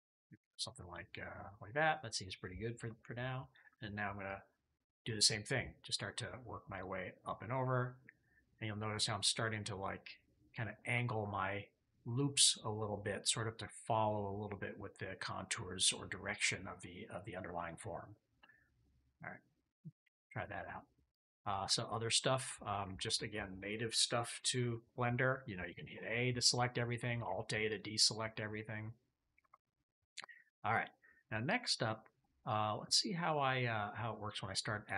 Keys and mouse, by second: 0.9 click, 1.6 click, 2.6 KP_3, 7.4 ctrl+click, 9.5 ctrl+click, 18.7 click, 19.9 a, 21.0 click, 21.7 click, 22.4 shift+click, 25.6 a, 27.1 alt+a, 27.6 click, 28.0 click, 29.3 KP_3, 30.2 shift+click, 31.9 shift+middle click.